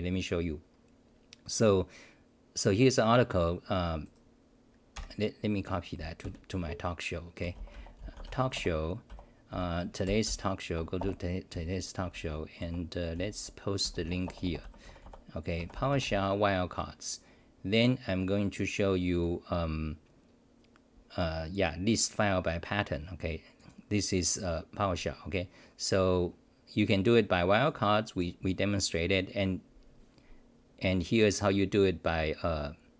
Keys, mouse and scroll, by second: 8.5 Return, 9.1 r, 9.5 t, 10.2-11.0 r, 11.0 Return, 11.5 s, 12.6-15.5 typing.